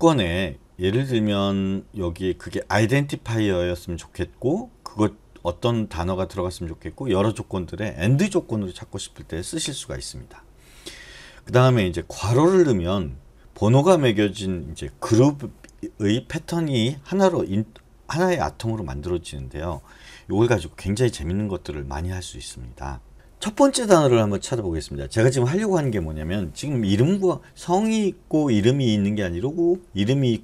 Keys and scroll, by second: 23.1 /.